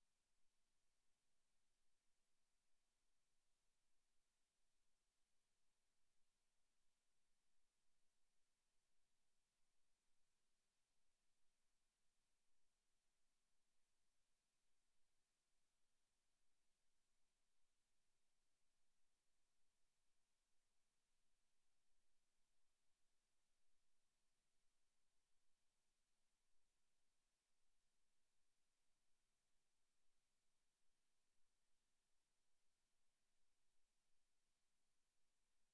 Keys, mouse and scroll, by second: 0.6 Tab, 1.5 shift+middle click, 2.3 g, 3.0 g, 5.8 middle click, 6.9 g, 9.2 scroll up 2, 9.5 middle click, 10.4-10.8 scroll down 3, 10.9 middle click, 11.5 space, 14.9 middle click, 15.6 r, 16.7 click, 17.4 ctrl+z, 17.7 r, 21.3 click, 23.2 r, 24.5 click, 25.1 r, 26.3 click, 27.0 click, 29.0 middle click, 29.9 shift+middle click, 30.9 g, 32.5 click, 32.6 s, 33.5 click, 33.6 g, 34.2 click, 34.5 middle click, 35.4 g.